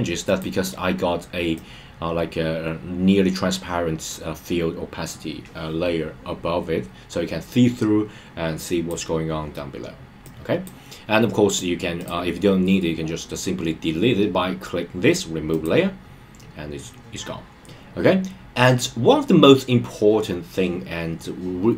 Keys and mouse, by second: 0.2 click, 1.5-9.0 drag, 10.2-10.7 drag, 11.4 click, 15.6 click.